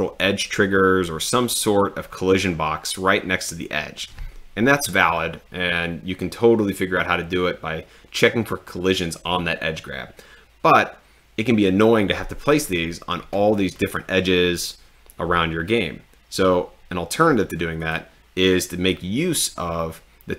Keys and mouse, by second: 17.9 click.